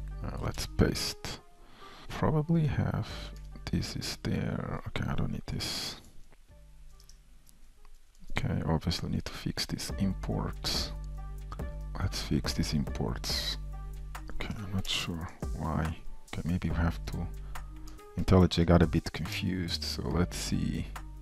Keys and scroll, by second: 1.6 Escape, 2.0 shift+super+F12, 2.2 ctrl+v, 2.2 shift+super+i, 8.2 super+BackSpace, 9.6 shift+Return, 9.6 shift+e, 11.5 F2, 15.2 alt+Return, 17.4 ctrl+alt+o, 17.9 super+s, 19.7 ctrl+w, 19.7 alt+Up, 20.7 super+c.